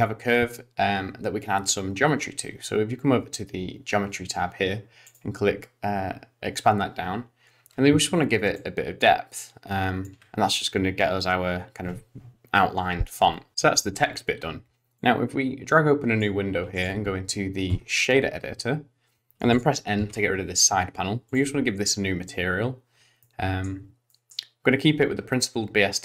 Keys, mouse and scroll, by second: 5.1 click, 8.7 shift+click, 15.0 click, 16.7 click, 19.5 click, 20.0 n, 21.3 click, 23.2 middle click, 24.1 middle click.